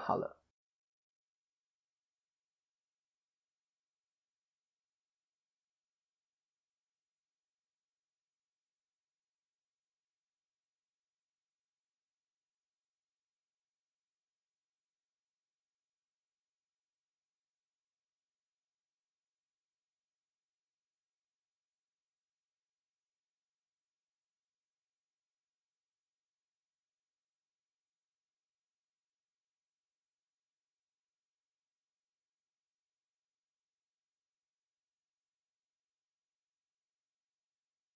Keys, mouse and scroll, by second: 0.5 KP_1, 2.6 click, 8.7 click, 8.7 o, 15.9 click, 17.1 o, 17.3-18.9 scroll up 2, 17.8 click, 23.6 Tab, 24.5 click, 27.2 KP_7, 29.1 click, 29.5-30.2 scroll down 3, 29.7 middle click, 31.8-32.2 scroll down 1, 32.2 KP_7, 32.9 KP_3, 33.2 KP_1, 34.1 click, 34.7 Tab, 35.0-35.4 scroll up 3, 35.4 a, 36.4 click.